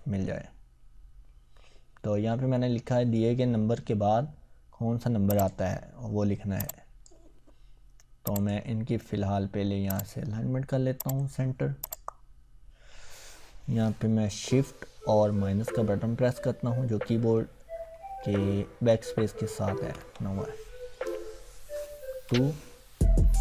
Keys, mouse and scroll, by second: 0.4-1.3 scroll up 1, 5.3-7.2 drag, 12.2 scroll down 1, 14.9-16.3 scroll down 1.